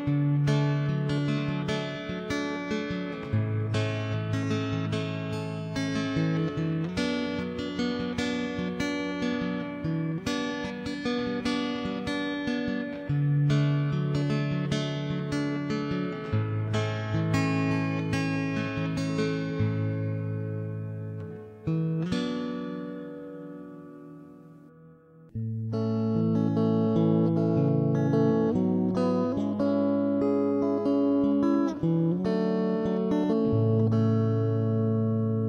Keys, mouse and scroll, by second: 0.6 middle click, 0.7 ctrl+r, 1.0 click, 1.2 ctrl+b, 1.6 middle click, 2.0-3.0 right drag, 2.8 click, 3.0 middle click, 3.1 s, 3.7 middle click, 4.5 ctrl+3, 4.5 middle click, 5.0 middle click, 5.2 ctrl+s, 5.7 ctrl+r, 6.2 click, 6.6 ctrl+r, 6.9 middle click, 7.4 ctrl+s, 7.8-9.4 middle drag, 9.3 Tab, 9.6 click, 9.9 middle click, 10.1 Tab, 11.0 middle click, 11.3 ctrl+KP_Add, 11.4 ctrl+KP_Add, 11.8 middle click, 12.2 ctrl+KP_1, 12.4 middle click, 12.9 click, 12.9 ., 14.3 ctrl+0, 14.9 click, 15.5 middle click, 15.9 ctrl+s, 16.3 right click, 16.6 middle click, 16.6 s, 17.1 click, 17.4 ctrl+3, 17.6 Tab, 17.6 middle click, 18.4 ctrl+s, 18.9 Tab, 19.0 middle click, 19.6 ctrl+r, 19.8 middle click, 20.2 ctrl+r, 20.8 click, 20.9 ctrl+r, 22.0 click, 22.1 middle click, 22.3 ctrl+r, 22.9 click, 23.1 middle click, 23.2 Tab, 23.5 ctrl+s, 24.8 Tab, 25.2 g, 26.2 right click, 26.2 g, 26.9 middle click, 27.1 Tab, 27.5 ctrl+s, 28.4 Tab, 28.8 click, 29.2 right click, 29.7 x, 30.6 ctrl+z, 30.8 x, 31.6 right click, 31.8 ctrl+b, 32.2 middle click, 32.5 Tab, 33.0 ctrl+s, 33.9 Tab, 34.4 ctrl+0, 34.6 middle click, 34.9 right click, 35.1 middle click, 35.2 s.